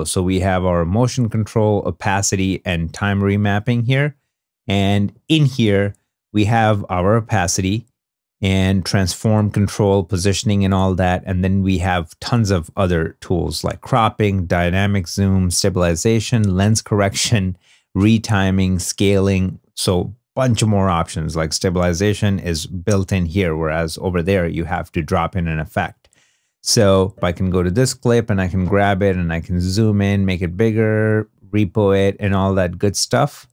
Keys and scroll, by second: 3.7 super+Tab, 25.4 2, 32.3 super+z.